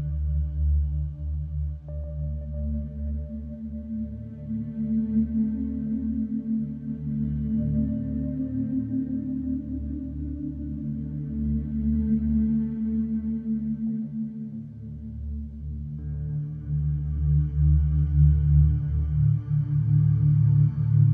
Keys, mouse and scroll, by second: 8.3 click, 11.0-16.8 drag.